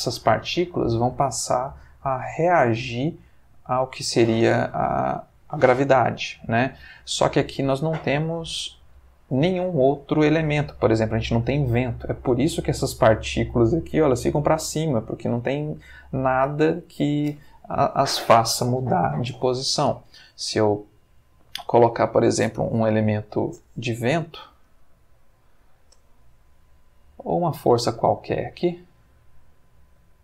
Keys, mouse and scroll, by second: 20.8-21.7 middle drag, 22.9 Escape, 24.1 shift+a, 27.4 click, 28.4 g, 29.8 click.